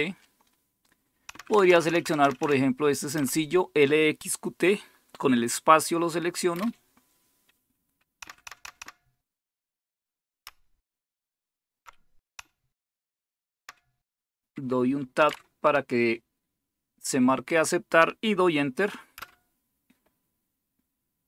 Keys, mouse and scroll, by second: 1.3 Down, 1.5 Down, 1.7 Down, 1.8 Down, 2.4 Down, 3.1 Page_Up, 6.5 space, 8.2 Page_Down, 8.6 Down, 8.8 Down, 10.4 Page_Up, 10.9 Up, 11.0-11.8 Up, 12.3 Down, 12.8 Down, 12.9-13.6 Down, 15.2 Tab, 19.1 Return.